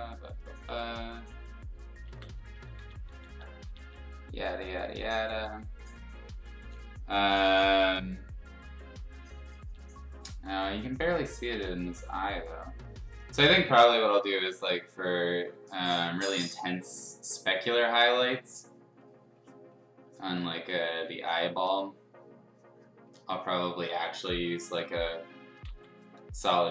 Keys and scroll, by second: 2.0 ctrl+z, 2.7-3.8 typing, 6.6 ], 6.8 ], 7.9 ], 9.6 [, 10.6 x, 11.5 ctrl+z, 13.6-15.1 typing, 17.8 ctrl+z, 20.4 x, 21.6 x, 25.6 ctrl+z.